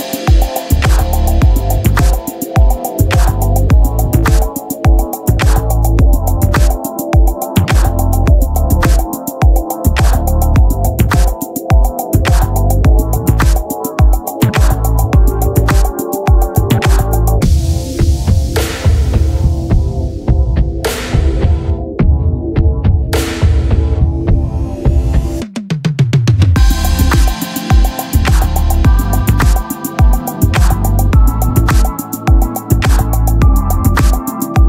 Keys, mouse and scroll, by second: 6.0 middle click, 7.4-8.5 drag, 9.2-11.9 middle drag, 15.5 click, 16.3-17.5 middle drag, 16.3 t, 17.8-25.1 drag, 25.9-27.4 drag, 27.4-29.1 right drag, 28.2 shift+d, 29.4 click, 29.4 s, 31.0 click, 32.3 s, 34.0 s, 34.5 s.